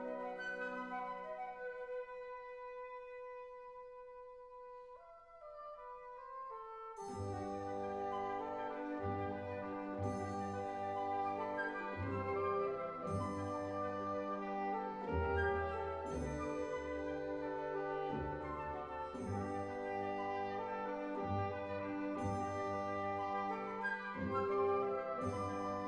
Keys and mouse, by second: 1.0 shift+click, 1.9 shift+click, 2.5 shift+drag, 3.6 shift+click, 5.1 shift+click, 6.0 shift+drag, 6.8 shift+click, 8.4 alt+shift+s, 11.9 click, 14.2 3, 15.2-16.4 drag, 17.1 shift+click, 18.0-18.4 shift+drag, 19.5 Delete, 20.6 Down, 21.7 2, 23.0 alt+click, 25.3 e.